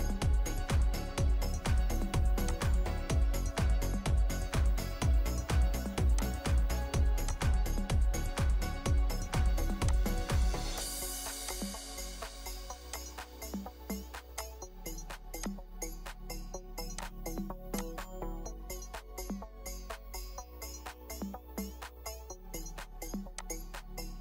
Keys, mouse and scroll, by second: 3.0 scroll up 1, 3.9-6.4 scroll down 1, 18.5-22.2 scroll down 1.